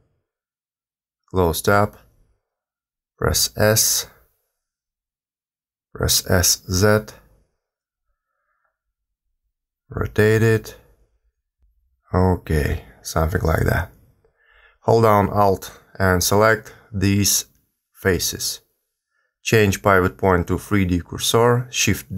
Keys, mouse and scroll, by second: 1.9 click, 2.9 s, 4.9 s, 7.9 s, 9.5 r, 11.9 g, 16.4 alt+click, 19.3 click.